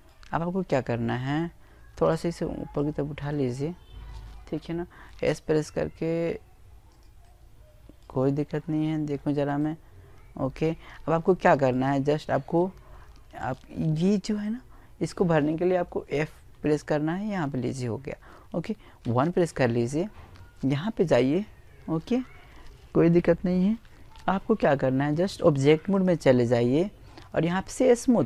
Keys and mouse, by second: 0.5 click, 0.5-1.9 right drag, 2.7 s, 4.7 click, 6.6 middle click, 7.4-10.0 middle drag, 10.3 middle click, 11.3 click, 11.7-14.1 middle drag, 14.1 f, 15.1-16.8 middle drag, 16.8 KP_1, 18.8 click, 20.6-21.9 middle drag, 23.1 click, 23.7 click, 25.7 click, 27.3 right click, 27.6-28.2 middle drag.